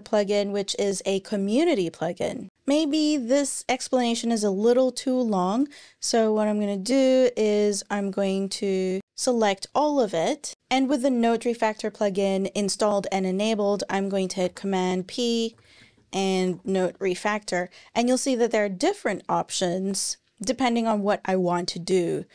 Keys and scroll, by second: 14.2 super+p, 15.1-16.8 typing, 18.5 typing.